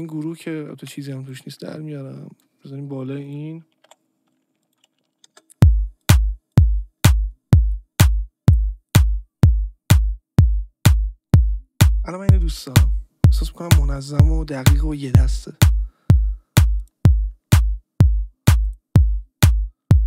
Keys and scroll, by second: 0.8 ctrl+t, 3.8 Delete, 5.2 space.